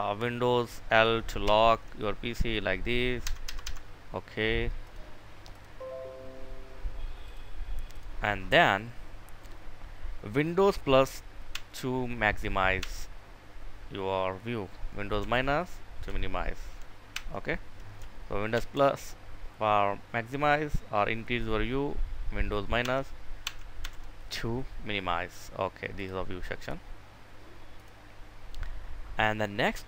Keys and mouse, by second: 0.8 super+i, 4.4 Escape, 4.9 click, 16.7 0, 26.0 right click, 27.3 click.